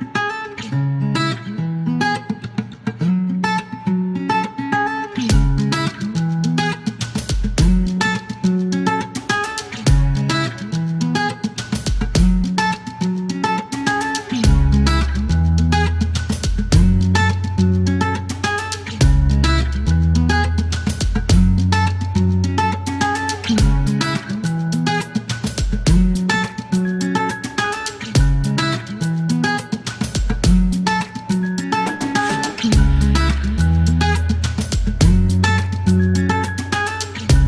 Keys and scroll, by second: 0.0-0.3 typing, 1.8 F1, 2.8 KP_9, 8.1 alt+m, 8.2 alt+z, 9.8 KP_9, 11.7 alt+m, 11.7 alt+z, 13.2 KP_9, 14.5 ctrl+z, 14.9 typing, 16.7 alt+e, 20.2 KP_9, 22.5 typing, 24.5 space, 25.9 typing, 26.0 alt+z, 27.0 alt+e, 27.3 KP_9, 32.5-33.3 typing, 35.1 typing, 36.6 KP_9, 37.2 alt+m, 37.3 alt+z.